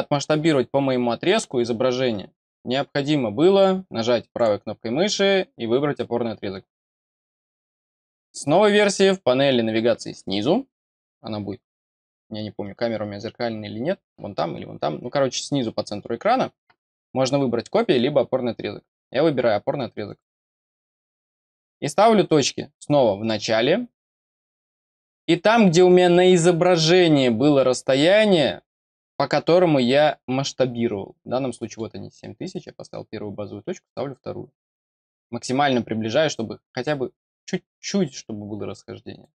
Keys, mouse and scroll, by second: 4.3 right click, 20.0 click, 21.4-22.1 scroll down 1, 22.1 scroll up 1, 23.1 click, 23.6 scroll down 1, 24.7-29.1 scroll up 2, 31.4 middle click, 31.7-34.5 scroll down 2, 34.6-35.9 scroll up 3, 39.0 click.